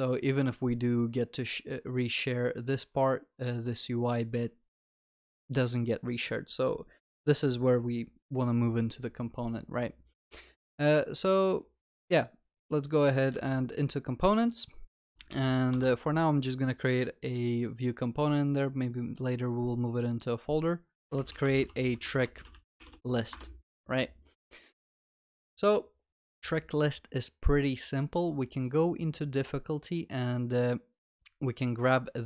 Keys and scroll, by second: 13.4 Right, 15.0 alt+Insert, 15.7 alt+Insert, 26.4 ctrl+s.